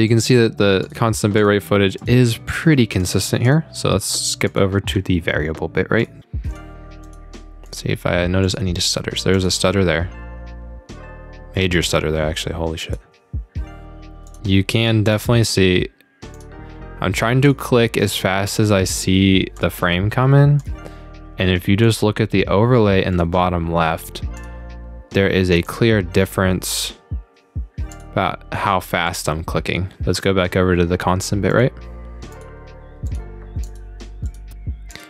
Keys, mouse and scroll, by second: 0.1 click, 0.8 click, 1.4 click, 2.0 click, 2.5 click, 3.0 click, 3.5 click, 4.0 click, 4.5 click, 6.0 click, 6.5 click, 7.0 click, 7.7 click, 8.4 click, 9.4 click, 12.8 click, 14.3 click, 15.1 click, 16.4 click, 17.5 click, 18.5 click, 19.6 click, 20.6 click, 21.8 click, 23.1 click, 24.2 click, 24.4 click, 24.9 click, 25.6 click, 25.7 click, 26.2 click, 26.7 click, 26.8 click, 27.5 click, 27.9 click, 28.1 click, 28.7 click, 29.1 click, 29.6 click, 30.2 click, 31.5 click, 32.3 click, 33.1 click, 33.7 click, 34.3 click, 34.9 click.